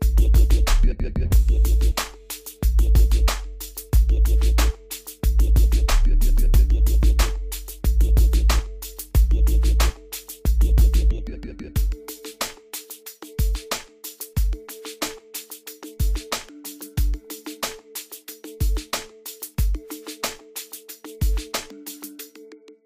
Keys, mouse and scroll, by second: 1.7-2.0 scroll up 1, 2.0 scroll down 1, 3.7 click, 5.1 Escape, 5.8 middle click, 6.6 scroll down 1, 7.8 scroll up 1, 11.1-12.0 scroll down 1, 12.6 click, 13.6 scroll down 1, 13.8 middle click, 14.9 scroll up 1, 16.3 click, 17.8-19.4 middle drag, 19.4 click, 20.8-21.2 scroll down 1, 22.0 scroll up 1.